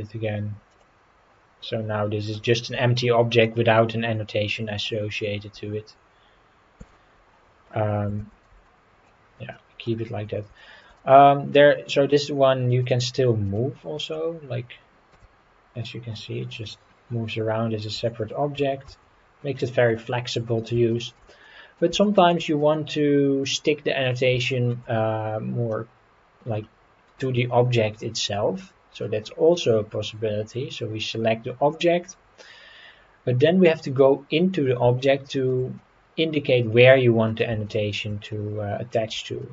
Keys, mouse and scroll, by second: 0.7 click, 2.3-3.4 middle drag, 3.7-4.1 scroll up 3, 6.8 x, 8.2 ctrl+z, 8.5 ctrl+z, 9.5-9.8 middle drag, 10.1 scroll down 3, 10.6 shift+middle drag, 11.0-11.6 middle drag, 12.1 click, 12.7 click, 13.4 click, 14.0 click, 15.1 g, 18.8 Escape, 19.4-20.0 scroll down 4, 20.0-20.5 middle drag, 20.9 shift+middle drag, 21.4-21.8 middle drag, 22.0 shift+middle click, 22.6-24.1 middle drag, 24.4-24.7 shift+middle drag, 25.1-25.6 scroll up 3, 26.4 scroll down 2, 27.0-27.4 scroll down 2, 28.2 click, 29.0-31.7 middle drag, 31.9-34.8 scroll up 4, 35.0-35.5 shift+middle drag, 35.8-37.3 middle drag, 37.6-38.0 shift+middle drag, 38.3-39.2 middle drag, 39.4 shift+middle drag.